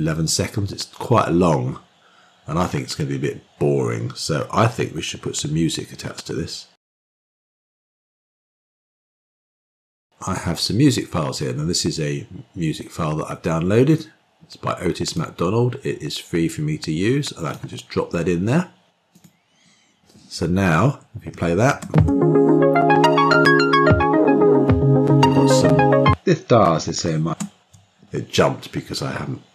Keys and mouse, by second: 21.5 shift+space, 27.1 shift+space.